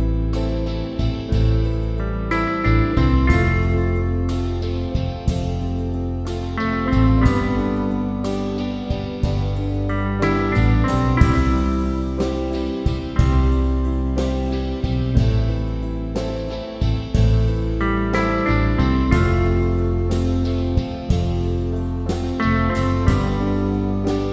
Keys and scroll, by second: 23.3 typing.